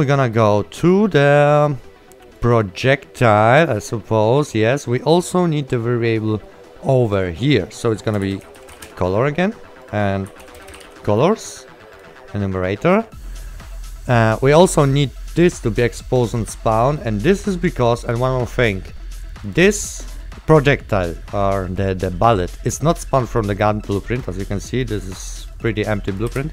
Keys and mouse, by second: 2.5 click, 7.2 click, 8.9 KP_Enter, 9.9 click, 10.3-11.5 typing, 12.0 click, 15.1 click, 23.0 click, 23.7 right click, 24.1 click, 24.9 right click, 25.7 click, 25.7 right click, 26.1 click, 26.4 Delete.